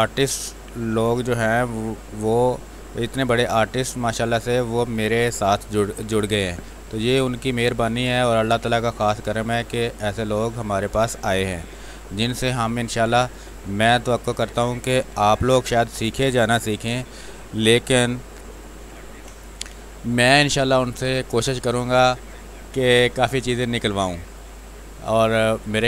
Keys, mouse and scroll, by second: 1.6-3.3 drag, 3.3 click, 4.3 x, 4.6-7.1 drag, 7.1-9.2 drag, 9.2 space, 9.4 click, 9.7 space, 10.2-13.9 drag, 13.9 space, 14.0 click, 14.4 space, 15.1 r, 15.2-18.7 drag, 18.8 b, 19.3 space, 19.5 click, 19.7 space, 20.6 click, 20.7-23.8 drag, 23.8 space, 23.9 click, 24.2 space, 24.9-25.8 drag.